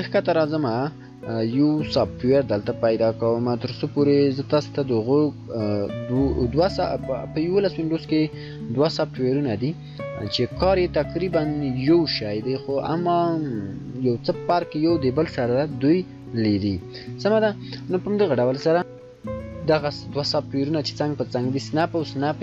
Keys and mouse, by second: 18.9 shift+F9.